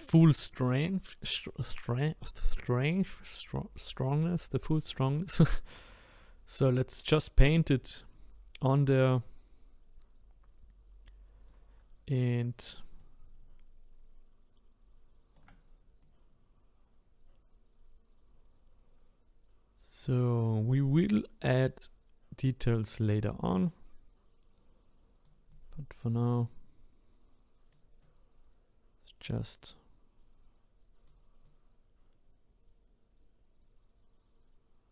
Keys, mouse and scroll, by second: 5.1-8.1 drag, 13.0-16.0 shift+right drag, 16.0-19.0 drag, 25.5-31.0 drag, 31.4-34.4 drag.